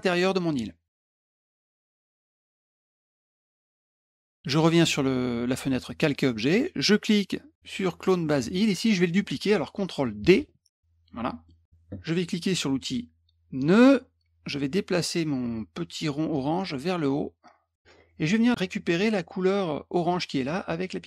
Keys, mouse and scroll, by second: 1.9 click, 2.2 click, 3.5 click, 5.9 middle click, 10.3 ctrl+d, 11.4 middle drag, 13.6 click, 16.3-17.8 drag.